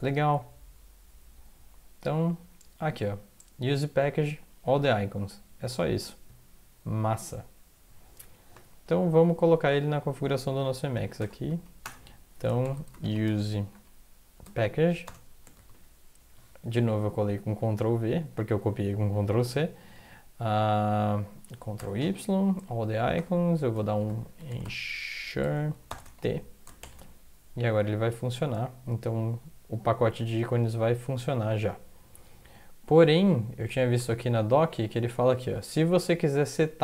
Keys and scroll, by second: 9.1 alt+Tab, 10.9 Up, 11.2 Return, 11.5 Up, 11.8 Return, 12.4-15.0 typing, 14.4 Tab, 15.5 ctrl+v, 19.1 End, 21.7 ctrl+y, 23.1 Return, 23.7-26.8 typing, 25.4 Tab, 30.8 alt+Tab.